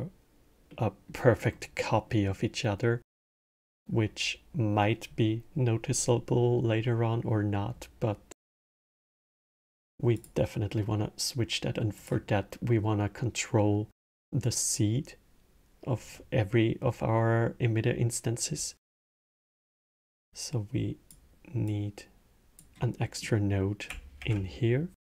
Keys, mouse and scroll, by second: 0.5 middle click, 1.3 scroll, 1.9-6.1 middle drag, 9.9 click, 11.7 click, 18.6-19.9 middle drag, 19.9-22.8 drag, 22.8-23.9 middle drag, 23.9 shift+a.